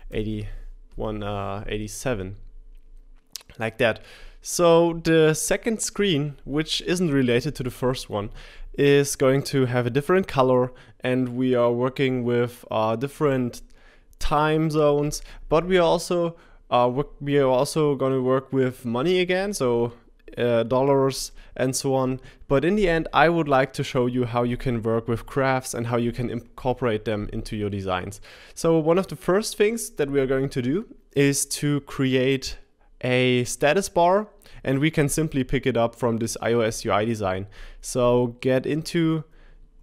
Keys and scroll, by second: 0.0-1.6 typing.